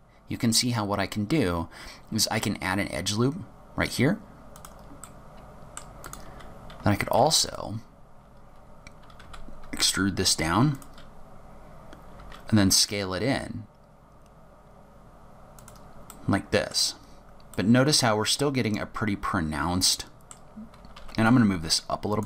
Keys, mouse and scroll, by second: 5.2 middle click, 6.2 click, 7.3 3, 7.6 click, 9.4 e, 12.3 s, 16.2 middle click, 17.0-17.6 scroll up 3, 17.6 middle click, 21.0 g.